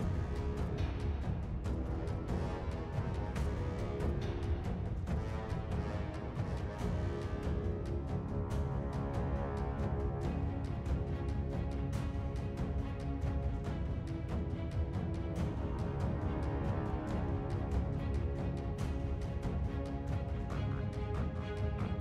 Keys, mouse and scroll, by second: 0.8-1.4 scroll down 3, 7.0 ., 7.4 7, 7.6 Return.